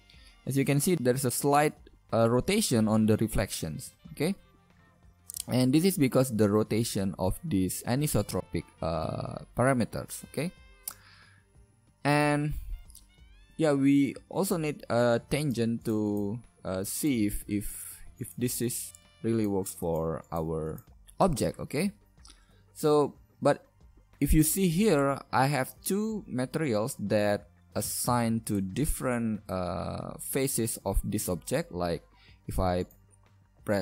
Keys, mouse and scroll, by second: 0.1 middle click, 7.3-9.4 middle drag, 15.2 g, 28.1 shift+z, 28.7-29.0 middle drag, 28.9 Tab, 29.0 shift+z.